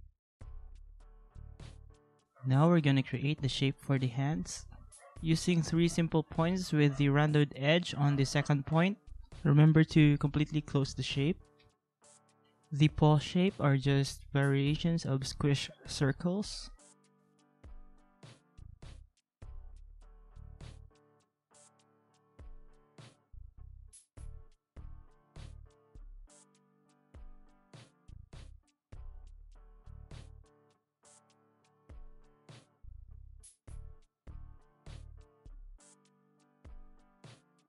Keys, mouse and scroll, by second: 3.2 ctrl+z, 5.8 alt+click, 6.5-7.6 alt+scroll, 8.0 ctrl+a, 9.8 ctrl+z, 28.4 ctrl+=, 29.6 alt+scroll, 29.7 ctrl+z, 30.2 ctrl+z, 30.9-31.9 alt+scroll, 36.6 alt+scroll, 37.3 ctrl+-.